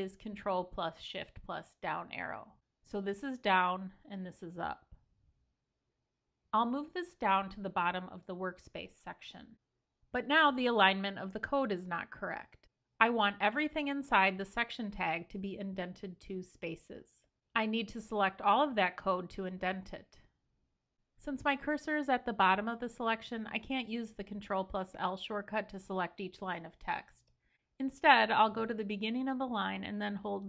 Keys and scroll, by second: 2.1 ctrl+super+Down, 3.6 ctrl+super+Up, 5.5 ctrl+super+Down, 8.1 ctrl+super+Down, 27.1 super+Left.